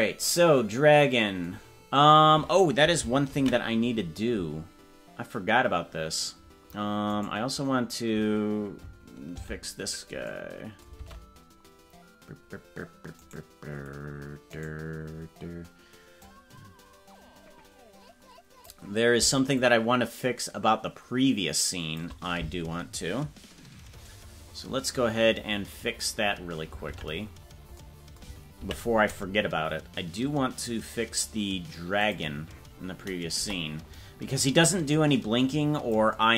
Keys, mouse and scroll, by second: 7.6-9.4 right drag, 9.4 alt+g, 11.1 ctrl+Tab, 13.3-14.8 right drag, 15.1 scroll down 2, 16.2-18.7 drag, 19.6-22.1 shift+drag, 31.5 ctrl+s, 32.1 click, 33.4 KP_0, 34.7-36.2 drag.